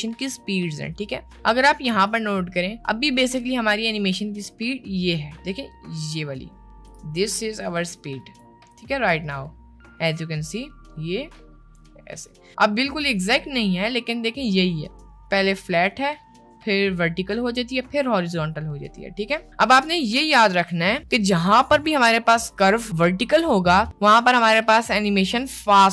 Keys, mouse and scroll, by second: 3.0 middle click, 6.9-8.5 drag.